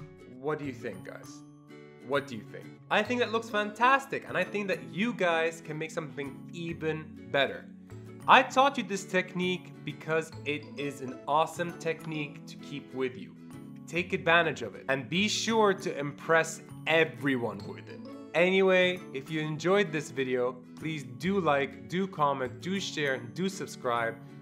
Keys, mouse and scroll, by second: 0.0 click.